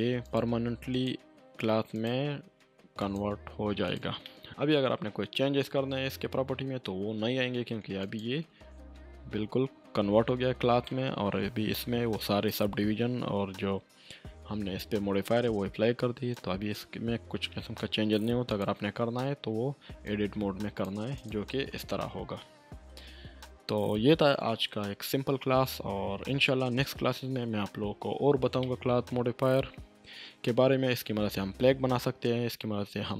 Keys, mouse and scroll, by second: 4.2 middle click, 4.5 Tab, 8.0 click, 8.5 Tab, 10.8-11.7 middle drag, 16.3-16.9 drag, 20.3-20.9 drag, 21.7 Tab, 22.9 ctrl+z, 24.6 ctrl+z, 26.3 ctrl+z, 27.8 Tab, 28.9-29.2 middle drag.